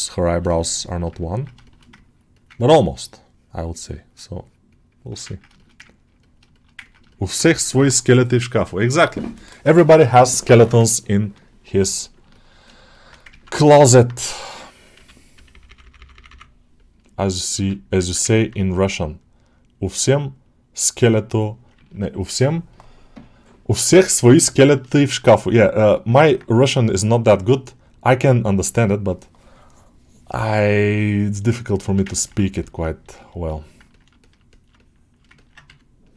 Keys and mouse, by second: 0.3 ctrl+alt+middle click, 0.7 alt+middle click, 1.1 ctrl+alt+middle click, 1.5 alt+shift+middle click, 2.4 ctrl+alt+middle click, 2.9 click, 3.2 click, 4.3 shift+click, 5.2 ctrl+alt+middle click, 5.4 shift+middle click, 5.7 ctrl+middle click, 6.0 middle click, 6.4 alt+shift+middle click, 6.7 ctrl+alt+middle click, 7.0 alt+shift+middle click, 11.9 alt+middle click, 12.2 ctrl+alt+middle click, 12.6 alt+shift+middle click, 13.6 alt+middle click, 18.2 ctrl+middle click, 19.0-21.6 drag, 21.6 ctrl+alt+middle click, 22.0 alt+shift+middle click, 24.4 alt+middle click, 25.0 ctrl+alt+middle click, 25.3 middle click, 26.0 alt+middle click, 26.4-31.5 drag, 31.7 alt+shift+middle click, 32.0 ctrl+alt+middle click, 32.5-34.0 middle drag, 34.1 alt+shift+middle click, 34.4 middle click, 34.6 alt+shift+middle click, 35.2-36.1 ctrl+alt+middle drag.